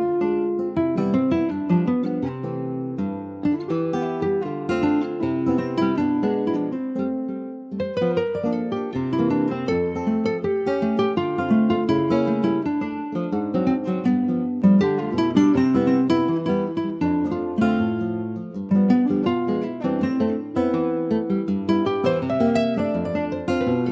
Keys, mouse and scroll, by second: 0.0 ctrl+s, 0.2-0.6 scroll up 2, 0.6 middle click, 1.0-1.5 scroll down 3, 1.5 click, 2.2 alt+middle click, 2.8-3.2 scroll up 3, 3.2 shift+middle click, 4.1 click, 5.2-5.6 scroll down 3, 5.6 middle click, 6.1 click, 6.4 shift+middle click, 6.9 scroll up 2, 7.1 Tab, 7.4 middle click, 7.6-8.2 scroll up 3, 8.2 ctrl+s, 8.4 middle click, 9.0 click, 9.6-10.6 middle drag, 10.6 Tab, 11.1 middle click, 11.6 Tab, 11.9 click, 12.4-14.5 middle drag, 14.5 scroll down 3, 14.8 middle click, 15.2 ctrl+s, 15.6 middle click, 16.2 ctrl+s, 16.8 alt+middle click, 17.3 alt+middle click, 18.1 ctrl+s, 18.5 alt+z, 19.4 alt+z, 19.9 middle click, 20.5 ctrl+s, 20.8 shift+middle click, 21.0-21.6 shift+scroll up 1, 21.6 click, 21.8 middle click, 22.0 scroll up 2, 22.3 shift+middle click, 22.8-23.1 scroll up 1, 23.1 shift+middle click, 23.6 scroll up 1, 23.8 ctrl+s.